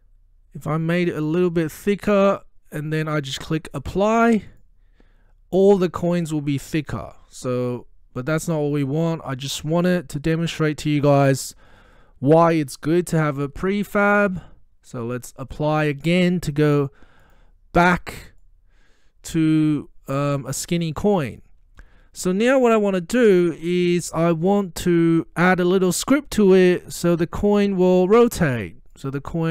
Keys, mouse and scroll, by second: 1.0-3.4 drag, 6.1-7.0 middle drag, 8.5-9.6 drag, 12.9-14.3 typing, 17.2 click, 18.5-20.4 middle drag, 24.8-25.2 scroll up 1, 25.2-26.5 scroll down 1, 26.5-29.2 drag.